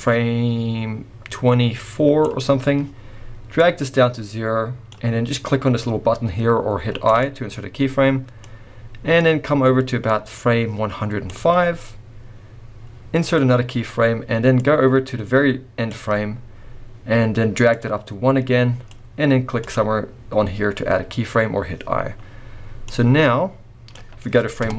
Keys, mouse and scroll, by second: 3.5 click, 7.1 click, 8.5 click, 13.3 click, 14.6 click, 17.7 click, 19.6 click, 22.0-22.6 scroll down 2, 22.6 scroll down 2, 22.8 click, 24.6 KP_0.